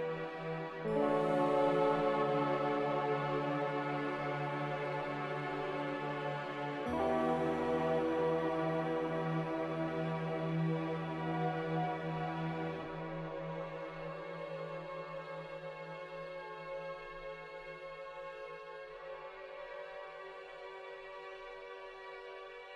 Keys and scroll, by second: 6.9 m, 15.1 b.